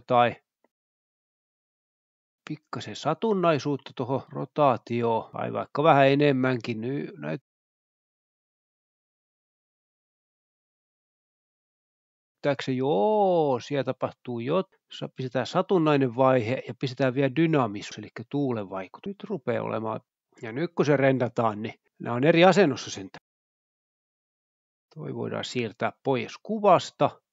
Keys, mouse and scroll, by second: 0.0 Escape, 1.2-1.8 scroll down 1, 5.4 click, 6.0-7.2 scroll down 2, 8.2-8.5 drag, 8.4-8.8 scroll down 2, 10.7-12.3 drag, 12.3 space, 13.9 click, 15.9 click, 17.7 click, 18.7 click, 19.6 click, 19.9 scroll down 1, 21.0 scroll down 1, 23.2 F12, 25.6 Escape, 25.8 click, 26.2 g, 26.4-26.7 drag.